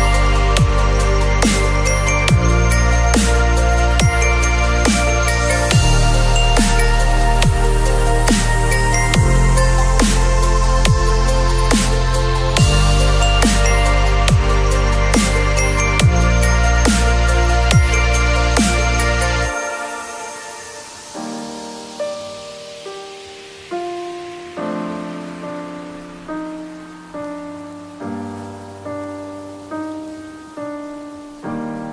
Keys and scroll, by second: 0.2 space, 2.4 ctrl+t, 11.9 ctrl+u, 17.7 space, 22.1 ctrl+t, 29.9 space, 31.4 ctrl+t.